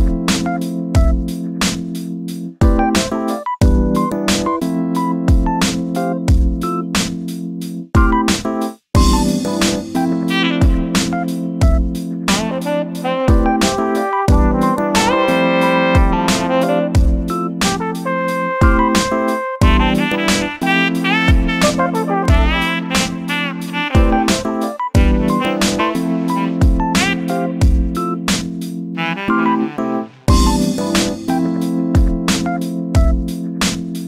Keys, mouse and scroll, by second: 0.3 click, 1.3 g, 2.9 scroll down 2, 3.0-3.6 middle drag, 3.6-4.3 scroll up 2, 4.3 KP_7, 4.7 scroll down 3, 5.0 shift+middle click, 5.4-6.0 scroll up 3, 6.0 shift+right click, 6.6 shift+a, 8.0 s, 9.8 g, 11.9 g, 13.1 s, 14.8 g, 17.0 click, 17.8 x, 19.0-19.4 scroll up 2, 19.4-19.8 shift+middle drag, 19.8 click, 20.6 g, 21.8 click, 22.5 e, 24.6 ctrl+z, 25.4 click, 26.4 shift+d, 28.2 g, 29.5 s, 31.8 g, 33.9 click.